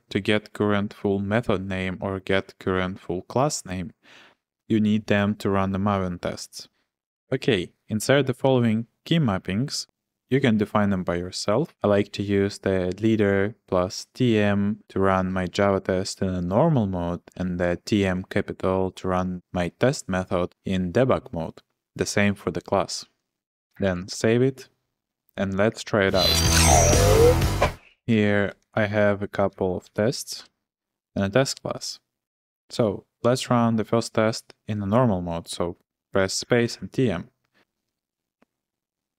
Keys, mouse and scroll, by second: 6.7 typing, 8.4 p, 11.7 w, 17.3 j, 21.9 j, 23.0-24.4 typing, 27.6-31.5 typing, 36.3-37.1 typing.